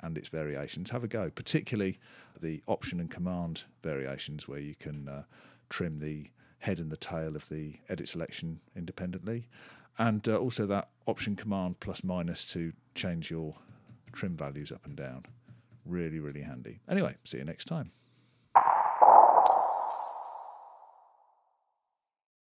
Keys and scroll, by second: 13.5 alt+super++, 13.9 alt+super+-, 14.7 alt+super++, 15.1 alt+super+-, 15.5 alt+super+-.